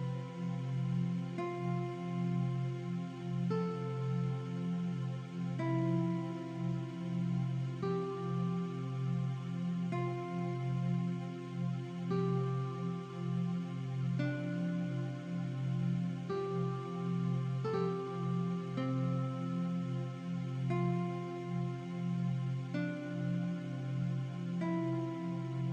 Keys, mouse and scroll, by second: 0.7 click, 1.0-1.4 typing, 1.4 click, 1.5 ctrl+a, 2.9 Left, 3.5 typing, 4.5 click, 6.3 click, 6.9 click, 7.7 t, 7.7 click, 9.3 typing, 9.3 click, 10.8 click, 11.9 click, 13.4 click, 14.4 shift+click, 15.6 click, 16.0 scroll down 1, 17.1 click, 18.1 shift+click, 18.7 click, 18.8 scroll down 1, 19.7 m, 20.5 alt+shift+click, 24.1 click.